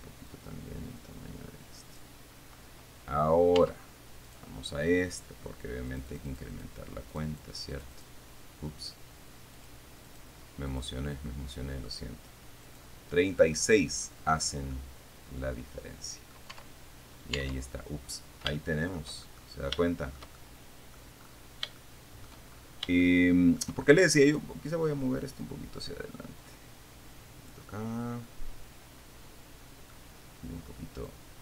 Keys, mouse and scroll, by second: 0.6 middle click, 0.8-2.4 drag, 4.0 Tab, 4.5 right click, 6.2 click, 7.4-8.5 drag, 9.8 click, 10.3 click, 11.0 click, 12.9 click, 15.0-16.8 middle drag, 17.0 Tab, 17.8 Tab, 19.4 shift+middle click, 20.1 shift+middle click, 20.7 shift+middle click, 21.4-22.0 scroll up 3, 22.5 shift+middle click, 22.7-23.2 shift+scroll up 3, 23.6 shift+middle click, 24.0-24.4 shift+scroll up 1, 24.5 right click, 25.7-28.0 drag, 28.5-30.4 middle drag.